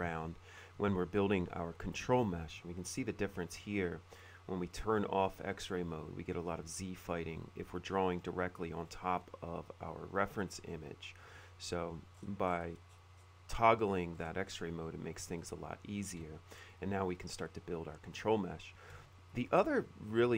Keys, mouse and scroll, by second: 0.2-1.6 ctrl+drag, 2.7 F3, 3.7-8.9 middle drag, 9.1-10.7 middle drag, 11.4 F3, 12.3-12.9 scroll up 2, 12.5 middle click, 13.0 middle click, 13.0-13.7 scroll down 1, 14.3 middle click, 14.3-14.9 scroll up 1, 15.5 ctrl+click, 17.6 click, 18.8 middle click.